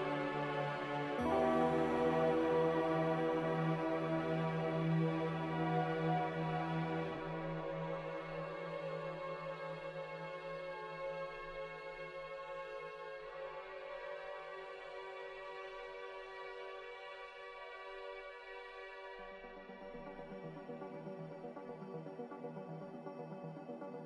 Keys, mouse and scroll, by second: 3.1 Delete, 4.8 Delete, 9.2 ctrl+w, 18.7 a.